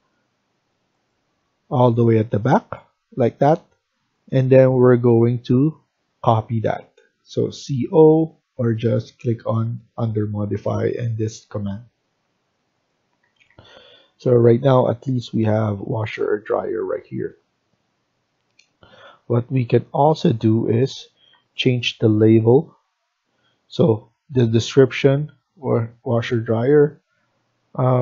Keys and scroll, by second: 3.1 Escape, 3.4 Escape, 13.1 Escape, 13.4 Escape.